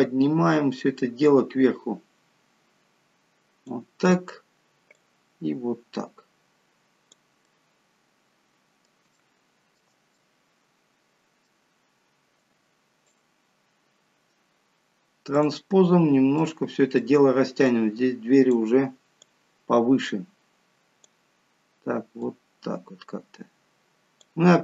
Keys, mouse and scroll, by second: 1.2 click, 4.9 click, 7.5 middle click, 9.1 shift+middle click, 10.1 middle click, 12.3 click, 15.3 click, 15.8-16.4 scroll up 1, 16.4 middle click, 16.4-16.8 scroll up 1, 17.7 click, 19.2 click.